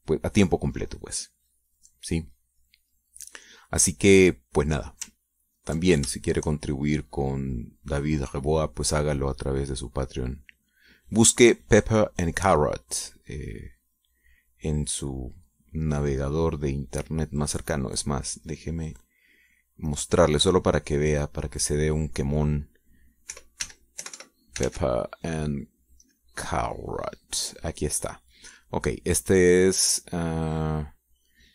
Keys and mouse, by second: 1.0 click, 2.2-3.2 middle drag, 3.3 middle click, 6.2 ctrl+click, 6.8 ctrl+shift+click, 7.3-16.0 shift+drag, 16.1-18.0 drag, 19.2 click, 20.5 click, 21.8 click, 23.7-25.9 typing, 26.7 click.